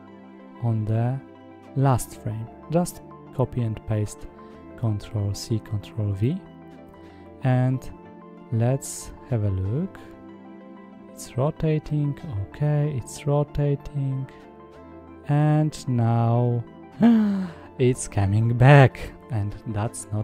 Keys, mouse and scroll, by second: 1.2 ctrl+v, 4.4-6.7 drag, 7.3 space, 9.5-10.3 scroll up 1, 10.3 scroll up 1, 11.5 click, 18.0 space, 19.6 click.